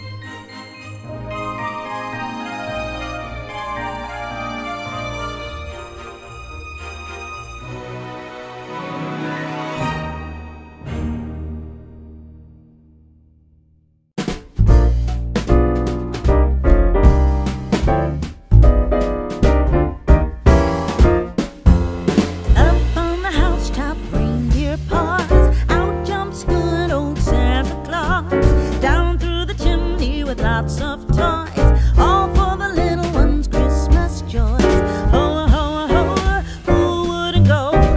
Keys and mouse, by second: 0.6 middle click, 1.6 click, 2.4 g, 2.8 z, 5.3 click, 6.1 middle click, 7.8 a, 8.3 g, 8.5 x, 10.5 click, 10.8 middle click, 13.2 Tab, 13.4 s, 13.7 x, 15.7 click, 16.9 middle click, 18.4 click, 19.6 KP_3, 20.2 g, 20.8 z, 21.7 click, 23.3 ctrl+r, 24.6 click, 25.0 right click, 25.5 s, 26.1 y, 27.5 click, 28.6 ctrl+r, 29.1 click, 30.2 click, 31.1 ctrl+r, 31.9 click, 32.5 right click, 34.3 ctrl+b, 37.5 click.